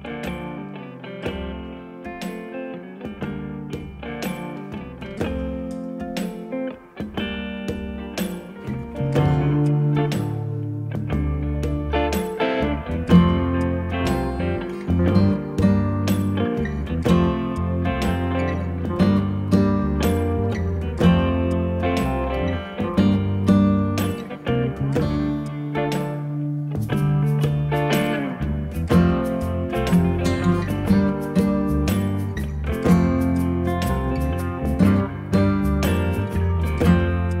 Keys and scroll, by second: 12.5 Escape, 13.2 d, 14.7 6, 14.8 ., 14.9 4, 15.1 Return, 17.2 Escape, 24.6 2, 28.5 3.